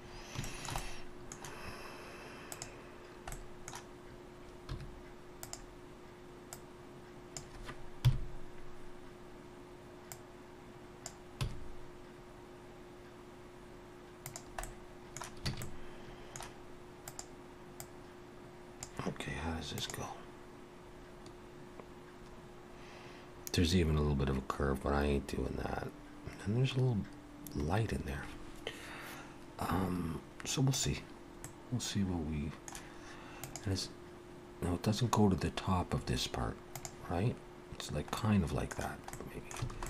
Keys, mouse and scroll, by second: 0.1 middle click, 0.1-0.7 scroll up 2, 0.4 shift+middle click, 0.7 shift+middle click, 0.8 middle click, 2.5 click, 3.3 middle click, 4.7 2, 5.4 click, 7.7 click, 8.1 KP_3, 10.2 click, 11.4 e, 14.7 middle click, 15.5 alt+a, 15.6 middle click, 17.0 click, 18.5 click, 31.5 middle click, 38.2 middle click, 39.2 middle click, 39.6 a.